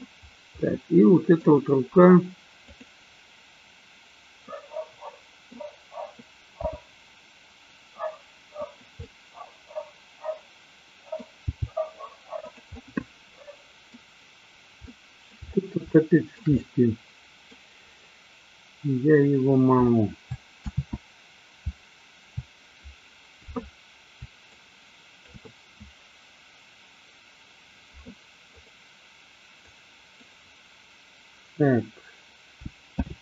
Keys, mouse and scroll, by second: 0.7 middle click, 2.7 click, 4.5-5.6 middle drag, 6.7 g, 8.7 click, 9.0 scroll up 1, 9.1-11.3 middle drag, 11.5 g, 12.6 click, 12.7-14.0 middle drag, 14.8 shift+middle click, 16.0-17.6 shift+middle drag, 21.1 ctrl+z, 24.6-25.5 ctrl+drag, 29.7-30.3 drag, 33.1 alt+g.